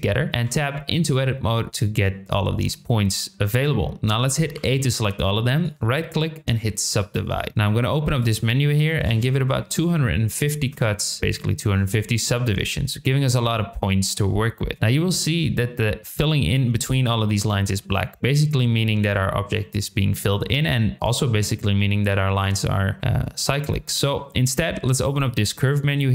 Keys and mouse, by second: 0.5 Tab, 1.0 middle click, 4.5 a, 5.6-7.1 right drag, 8.3-11.2 drag, 10.6 KP_Enter, 15.7 middle click, 17.4 middle click, 25.1-26.1 drag.